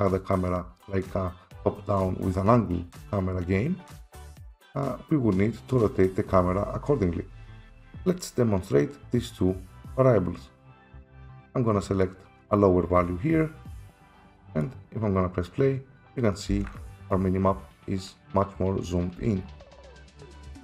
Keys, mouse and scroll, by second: 7.9 F7, 12.0 click, 13.8 typing, 14.6 right click, 16.2-18.0 typing, 17.1 click, 19.2-20.5 typing.